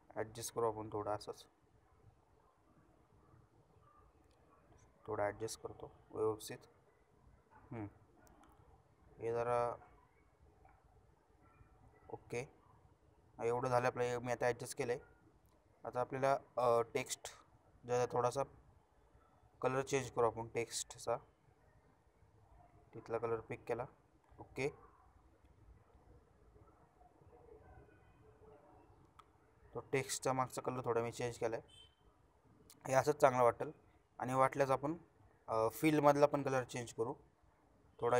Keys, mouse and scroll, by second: 25.7 shift+click, 27.8-28.3 alt+shift+scroll down 1, 28.3 alt+shift+scroll up 1, 29.4 shift+click, 33.9-35.2 shift+drag.